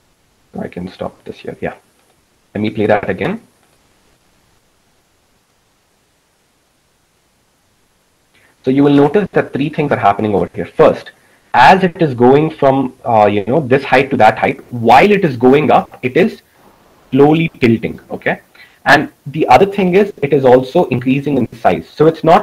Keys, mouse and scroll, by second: 2.4-7.7 drag.